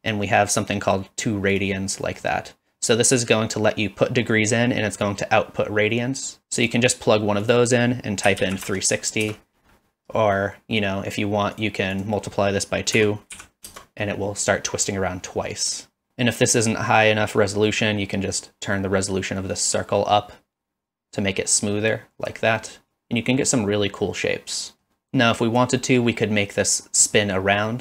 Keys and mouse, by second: 2.1 middle click, 2.7 click, 5.1-6.7 drag, 7.6-9.7 drag, 10.4 middle click, 11.5-14.1 drag, 17.7 middle click, 19.5-22.3 drag, 22.6-24.8 middle drag, 25.0 click, 25.8 middle click, 27.1 middle drag, 27.7 middle click.